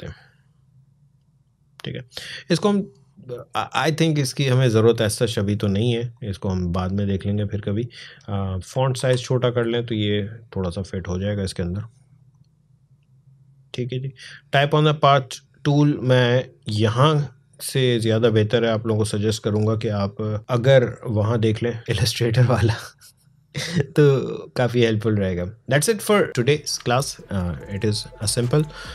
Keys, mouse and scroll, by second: 4.0-8.0 drag, 8.7 ctrl+a, 9.7-22.9 drag.